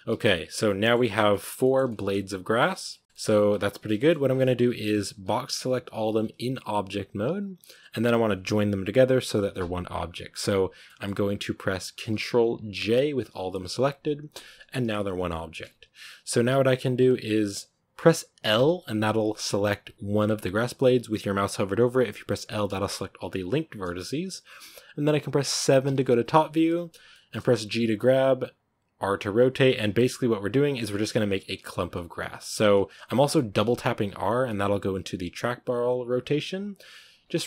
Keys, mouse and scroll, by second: 0.1 z, 0.2 scroll down 3, 0.5-1.4 middle drag, 1.4 g, 2.4 shift+right click, 2.6 g, 3.6 shift+right click, 3.8-4.2 shift+middle drag, 4.2 scroll up 2, 4.4 a, 5.8 b, 10.7-12.6 middle drag, 12.6 ctrl+j, 14.2 Tab, 14.7 a, 14.9 a, 15.5 Tab, 16.3 Tab, 16.8 a, 18.4 l, 25.7 KP_7, 27.0 shift+middle click, 27.5 g, 28.9-31.2 typing, 31.8-33.4 middle drag, 33.4 r, 36.4 g, 36.9 r.